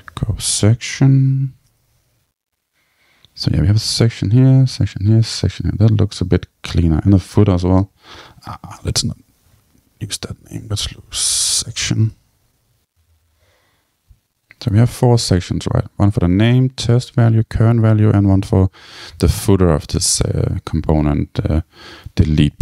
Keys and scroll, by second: 1.5 Return.